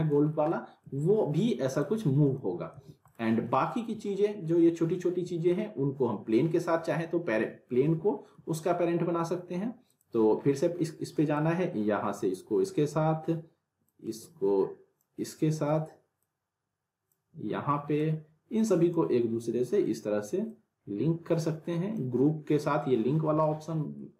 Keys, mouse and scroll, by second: 0.3 scroll down 1, 0.5-1.1 alt+middle drag, 1.8-2.4 click, 2.7 z, 3.1 click, 5.5 scroll up 1, 7.0-7.9 alt+middle click, 7.8 scroll up 1, 8.0 alt+middle click, 8.1 alt+middle click, 9.9-12.9 drag, 13.9-15.1 drag, 16.2-17.1 drag, 18.0-19.2 drag, 20.5-22.0 drag, 23.2 scroll down 1, 23.4-24.0 alt+middle drag.